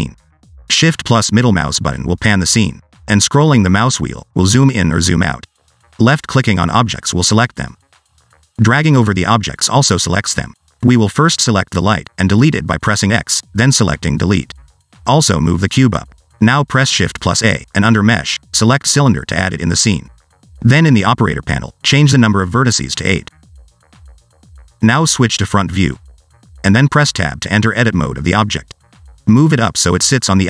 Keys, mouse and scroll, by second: 1.6 shift+middle click, 3.3 scroll down 2, 3.5-3.9 scroll up 5, 3.9-5.5 scroll down 2, 7.3 click, 7.8 click, 8.4 click, 8.8 click, 9.4 click, 11.2 click, 12.9 click, 13.5 x, 15.0 click, 15.5 click, 17.0-17.4 scroll up 2, 17.4 middle click, 18.2 shift+a, 21.6 click, 22.4 click, 25.1 click, 29.5 Tab.